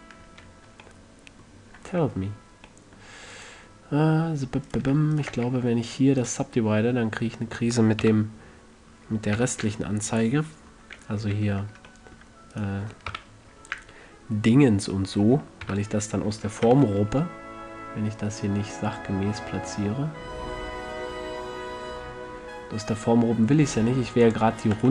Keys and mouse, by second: 0.7-2.0 middle drag, 3.1-4.1 middle drag, 4.1-7.4 drag, 5.7 w, 7.4-8.4 middle drag, 8.4 click, 8.4 KP_3, 9.7 KP_5, 11.6 a, 12.9 middle click, 13.5 KP_1, 16.0 KP_3, 17.0 z, 17.5 g, 24.7-24.9 drag.